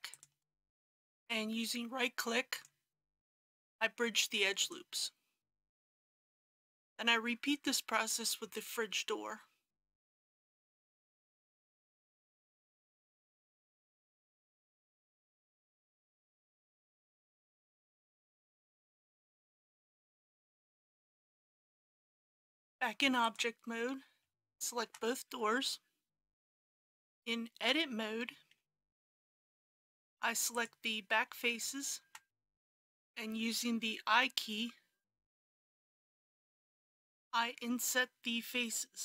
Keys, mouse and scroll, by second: 0.1 shift+click, 2.5 right click, 4.5 click, 6.3 Tab, 10.4 click, 13.2 Tab, 14.8 alt+click, 16.0 alt+f, 17.1 click, 18.4 shift+click, 19.0 right click, 21.2 click, 22.0 Tab, 23.2 click, 24.5 shift+click, 26.7 Tab, 27.1 KP_1, 28.6 3, 30.6 click, 31.6 shift+click, 35.3 i, 36.3 i.